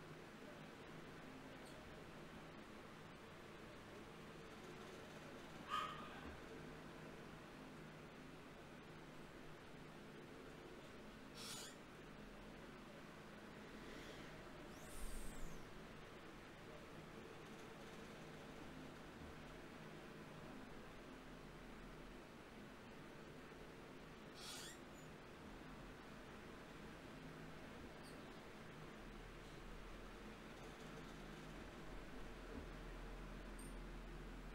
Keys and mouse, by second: 1.7-5.8 drag, 6.6-9.5 drag, 6.6 d, 9.7-12.7 drag, 13.3 shift+q, 18.9-20.9 right drag, 20.9-28.4 drag, 25.4-28.2 right drag, 28.8-34.0 drag, 33.4 ctrl+Tab.